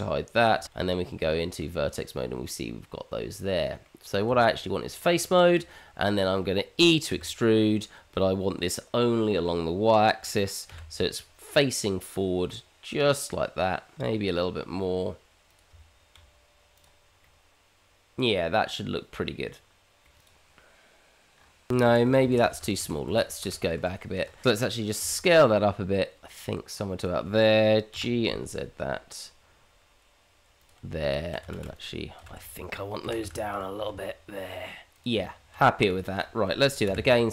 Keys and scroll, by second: 0.4 h, 0.7 Tab, 4.3 Tab, 7.1 e, 13.9 g, 15.7 Tab, 21.9 ctrl+z, 24.2 ctrl+z, 24.4 Tab, 25.0 s, 27.9 g, 30.8 Tab, 31.5 shift+z, 32.4 shift+z, 33.0 g, 35.1 Tab, 36.8 q.